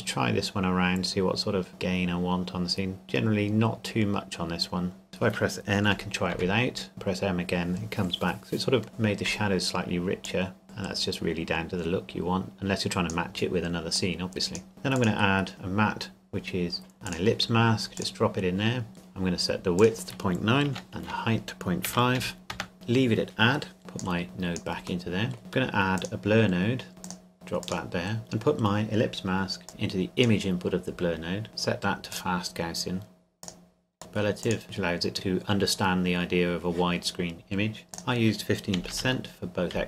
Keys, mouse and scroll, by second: 6.3 m, 10.3 click, 17.1 click, 19.8 click, 20.7 KP_Decimal, 20.9 click, 21.9 KP_Decimal, 22.2 KP_5, 22.5 KP_Enter, 23.8 click, 25.1 middle click, 25.4-25.7 scroll up 1, 26.0 click, 29.7 click, 31.5-32.1 scroll up 1, 32.1 click, 34.0-34.4 scroll up 1, 34.4 click, 37.9 click, 38.8 KP_1, 38.9 KP_5, 39.7 KP_5.